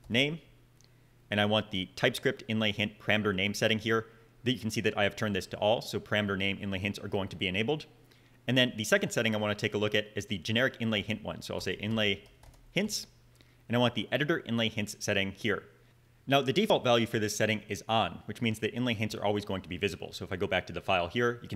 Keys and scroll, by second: 0.0-1.5 typing, 9.3 super+a, 11.0-13.3 typing.